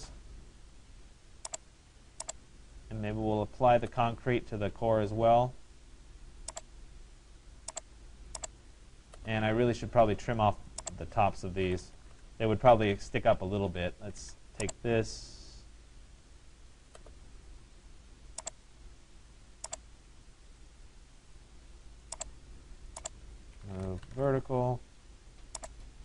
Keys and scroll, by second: 11.7 Return, 23.8 Return.